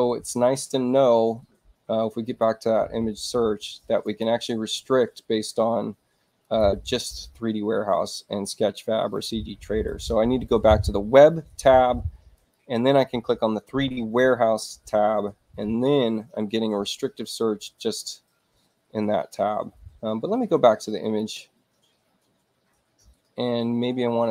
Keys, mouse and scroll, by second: 2.2 click, 3.9 click, 6.3 click, 12.3 click, 15.3-17.4 middle drag, 18.1-19.2 middle drag, 20.9 click.